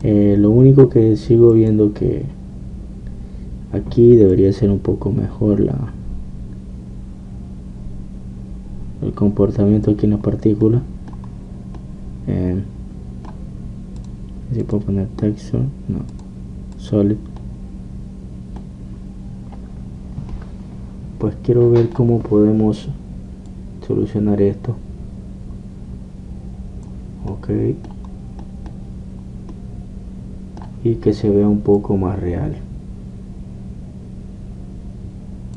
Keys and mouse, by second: 0.0 Escape, 0.0-8.0 drag, 11.3 click, 11.6-14.8 middle drag, 15.4-19.7 drag, 22.0-23.0 middle drag, 24.5-28.4 drag, 28.4-32.5 middle drag, 32.8-34.6 drag.